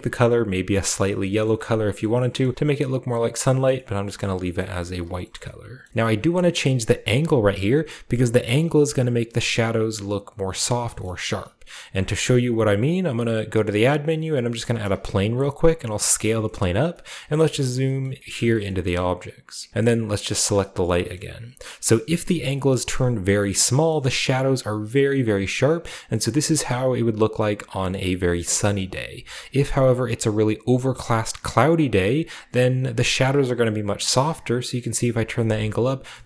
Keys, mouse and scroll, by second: 1.4 middle click, 2.0 shift+middle click, 2.4-3.4 middle drag, 2.4-2.8 scroll up 1, 3.1 scroll down 1, 3.7 middle click, 4.7 r, 4.9-5.8 shift+drag, 6.7-9.0 drag, 8.7 right click, 9.4-10.6 middle drag, 11.9 shift+a, 14.5 click, 14.9 scroll down 2, 15.1 s, 15.7 drag, 15.9 g, 16.1 click, 16.4-17.7 shift+drag, 16.4 shift+scroll down 1, 16.6-19.3 scroll up 1, 19.7-20.2 scroll down 1, 20.4 right click, 20.6-22.3 scroll up 1, 20.8 shift+right click, 21.0-24.1 shift+middle drag, 22.5 click, 24.4-25.6 scroll up 1, 29.9-31.1 drag, 32.0 click, 33.6-34.0 scroll down 1, 35.2 scroll down 1, 35.4-35.9 middle drag, 35.9-36.2 scroll down 1, 36.1-36.2 middle drag.